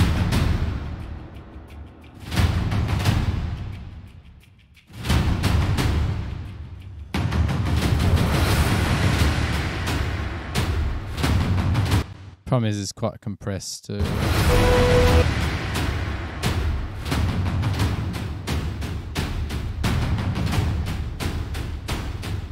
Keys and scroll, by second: 11.6 super+=, 14.1 space, 14.6 s, 15.3 s, 20.1 super+=.